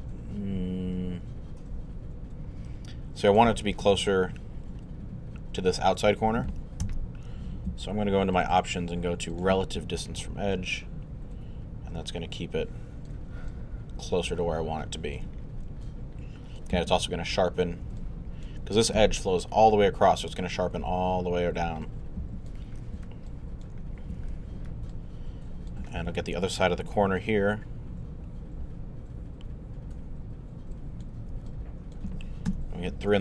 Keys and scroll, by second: 6.8 alt+z, 32.5 alt+3.